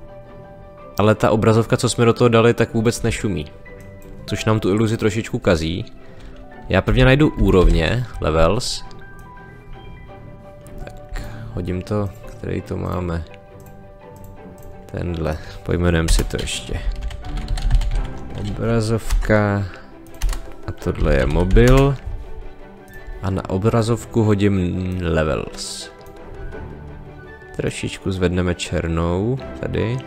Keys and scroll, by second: 6.8 l, 8.8 s, 16.0 Return, 16.8 o, 19.0 a, 20.9 m, 21.6 Return.